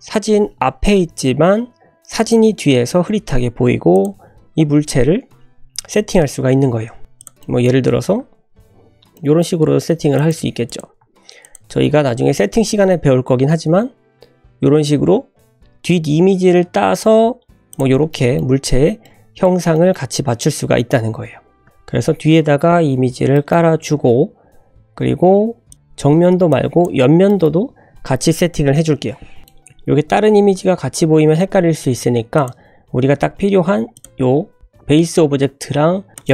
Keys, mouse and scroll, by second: 1.4 scroll up 1, 2.2 click, 2.9-3.3 scroll down 2, 3.6 scroll up 1, 3.9 click, 4.6 Tab, 4.9 1, 5.6 a, 7.0 ctrl+b, 7.0 ctrl+z, 7.2 click, 7.4 middle click, 7.9 scroll down 1, 8.2 Tab, 8.5 Tab, 8.7 2, 8.9 scroll up 1, 9.1 middle click, 10.1 alt+shift+click, 10.6 click, 11.4 ctrl+alt+shift+click, 12.8-13.5 scroll up 1, 13.7 ctrl+b, 16.7 c, 18.1 shift+middle click, 18.5 scroll up 2, 18.7 Tab, 19.0-19.4 middle drag, 19.4 scroll down 1, 19.7 shift+middle drag, 21.2 ctrl+z, 21.5 ctrl+z, 22.3 scroll up 1, 22.9 scroll down 2, 23.3 shift+middle drag, 24.5 scroll down 1, 24.7 click, 25.2 scroll up 2, 26.5-26.8 drag, 27.2 shift+middle drag, 29.4 click, 29.4 middle click, 29.4-30.1 scroll down 4, 30.1-30.6 scroll up 3, 31.0 `, 31.7 scroll up 2, 32.3 click, 32.7-33.6 scroll up 1, 33.9 click, 36.1 shift+click.